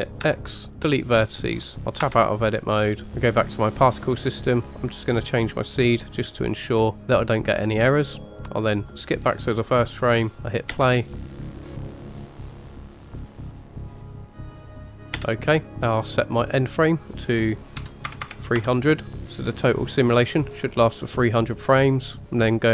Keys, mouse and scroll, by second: 0.2 x, 1.5-2.1 scroll down 2, 2.1 Tab, 3.1 middle click, 3.7 click, 5.1 click, 8.4 click, 9.4-10.0 middle drag, 10.1-10.7 scroll down 3, 10.7 space, 15.2 space, 15.6 click, 15.6 scroll up 4, 18.2 click, 18.2 KP_0, 19.2-20.2 scroll down 2.